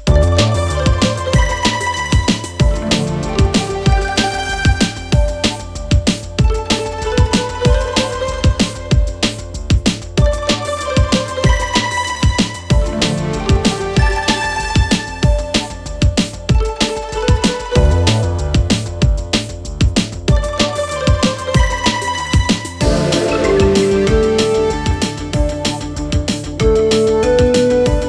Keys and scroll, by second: 1.6 4, 3.5 3, 19.3 ], 23.4 Delete, 25.8 4.